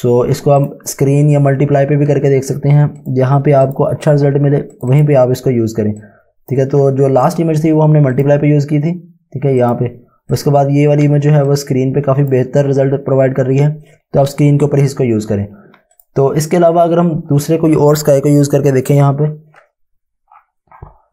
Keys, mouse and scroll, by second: 3.0 click, 3.6 click, 4.8 click, 6.1 click, 11.3 space, 11.6 click, 11.8 space, 12.3 space, 15.9 click, 16.8-21.0 scroll down 1, 21.0 scroll up 1.